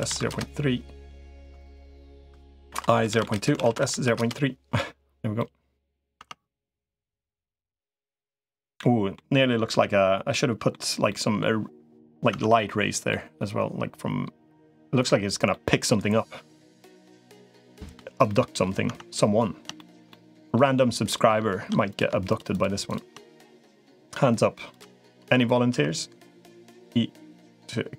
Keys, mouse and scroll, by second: 1.1 click, 2.5 i, 3.5 alt+s, 5.2 middle click, 6.1 Tab, 6.7-9.0 middle drag, 9.5 Tab, 10.1 middle click, 10.9 middle click, 12.1 Tab, 12.9-14.8 middle drag, 15.3 middle click, 17.0 middle click, 18.1 middle click, 18.7 Tab, 19.6 shift+middle click, 19.9 middle click, 21.7 click, 22.1 shift+click, 23.7 i, 24.8 middle click, 25.5 e.